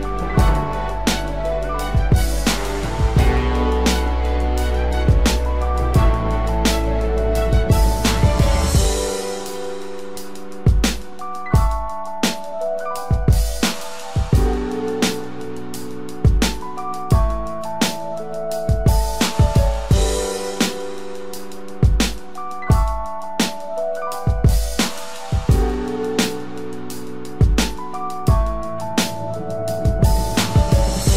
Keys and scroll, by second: 14.7 ctrl+z.